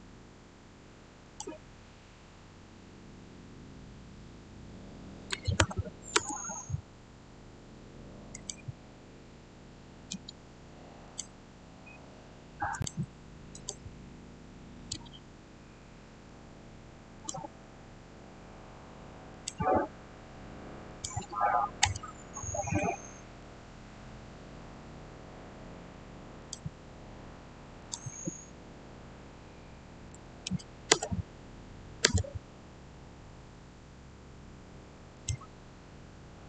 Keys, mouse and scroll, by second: 1.1 click, 5.0-6.0 typing, 6.0 Return, 8.2 click, 11.0 click, 15.7-17.1 middle drag, 17.1 click, 17.6 scroll up 1, 19.2 click, 21.7 Return, 22.1 scroll down 1, 26.3 click, 30.0 click, 30.1-30.8 typing, 35.0 Return, 35.0 click.